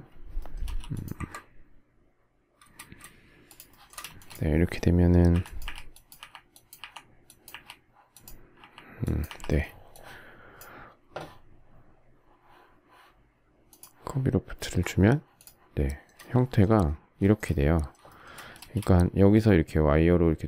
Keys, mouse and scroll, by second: 0.7 m, 3.5 shift+click, 3.7 shift+middle click, 3.9 shift+double middle click, 4.1 space, 5.3 Delete, 9.5 Delete, 15.8 shift+middle click, 17.2 shift+middle click, 17.3 shift+middle click, 18.2 shift+middle click, 18.5 space.